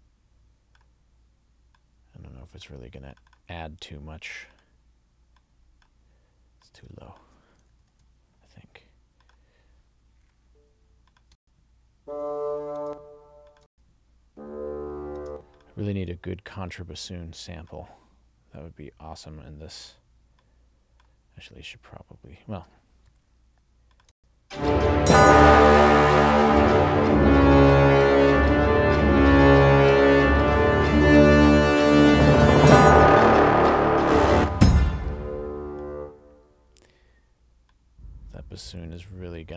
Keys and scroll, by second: 7.8 alt+shift+Up, 11.3 space, 12.8 space, 15.2 space, 24.1 space, 34.3 space.